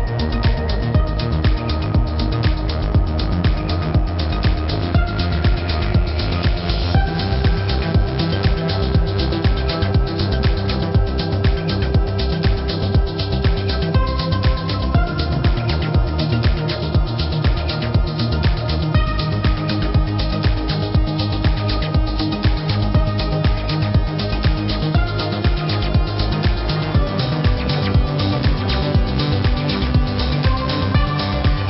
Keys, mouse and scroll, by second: 1.7 click, 3.6 alt+click, 4.9 alt+click, 6.5 alt+click, 7.0 ctrl+z, 7.2 click, 7.7 click, 9.0 click, 9.6 z, 9.9 click, 10.3 click, 11.6 ctrl+c, 11.6-12.3 typing, 12.4 ctrl+f, 15.8 alt+click, 17.2 alt+click, 17.7 click, 19.2 click, 19.7-20.8 typing, 20.7 click, 21.6 click, 22.7 click, 26.2 z, 29.6 click.